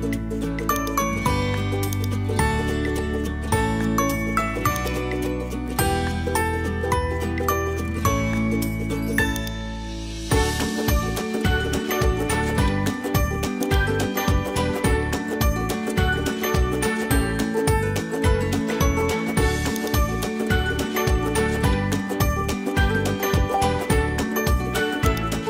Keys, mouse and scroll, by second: 0.7 click, 1.6 Tab, 1.9 click, 3.7 shift+s, 5.5 middle click, 6.7 Tab, 7.7 shift+a, 10.7 s, 15.4 g, 16.9 KP_1, 17.8 g, 20.4 middle click, 21.4 KP_1, 22.3 g.